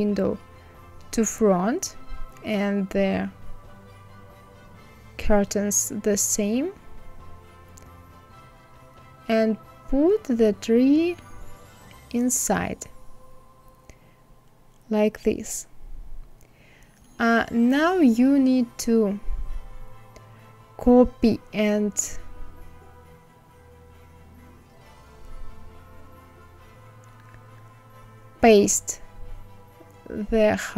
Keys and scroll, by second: 22.9 ctrl+c, 27.8 ctrl+v.